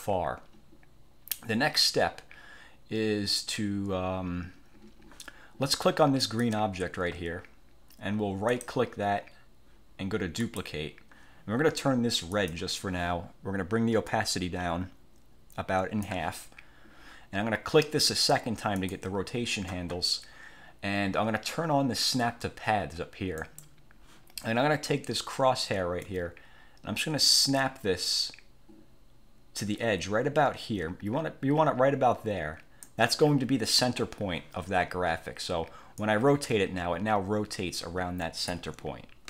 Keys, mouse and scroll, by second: 6.4 click, 8.6 right click, 10.6 click, 12.5 click, 14.2-16.4 drag, 18.9 click, 23.5 click, 26.2-33.2 drag, 36.1-38.8 drag.